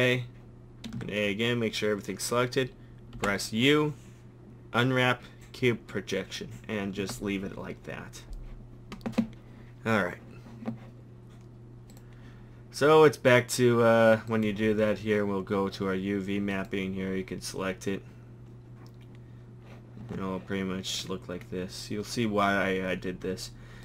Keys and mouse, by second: 1.0 a, 3.2 u, 7.0 Tab, 11.9-13.5 drag, 16.5-20.0 drag, 20.0 Tab.